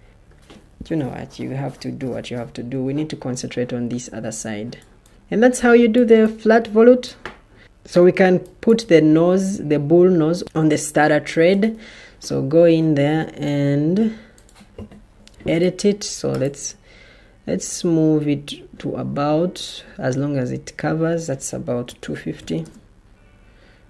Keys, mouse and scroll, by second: 21.7-22.8 typing.